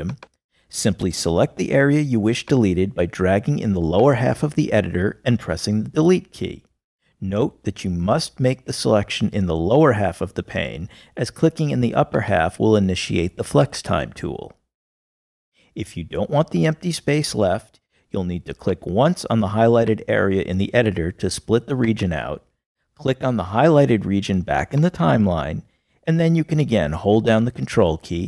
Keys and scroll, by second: 7.3 BackSpace, 27.7 ctrl+BackSpace.